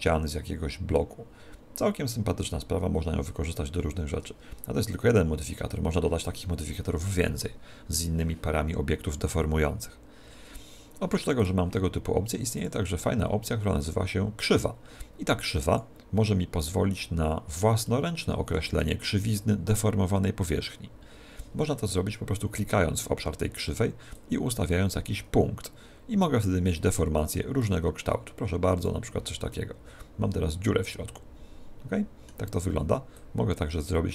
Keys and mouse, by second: 7.1-11.4 middle drag, 11.4 right click, 12.6 click, 17.9-20.6 middle drag, 24.2 click, 27.6 click, 29.6-31.3 middle drag, 33.2 click.